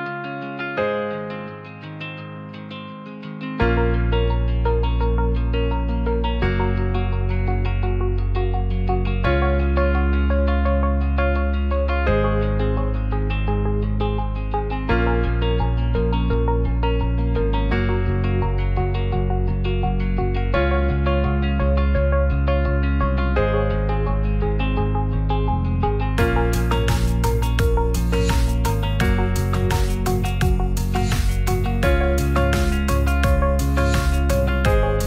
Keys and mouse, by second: 0.2 middle click, 0.9 g, 1.0 z, 2.8 click, 3.2 s, 3.3 z, 4.1 click, 5.3 Tab, 5.3 ctrl+middle click, 6.3-7.4 middle drag, 9.5-9.8 middle drag, 10.4-11.9 drag, 12.3 click, 14.5 s, 14.7 middle click, 16.0 s, 16.2 z, 16.8 shift+click, 17.2 g, 17.3 z, 21.5 r, 22.2 click, 31.6 Tab, 32.4 a.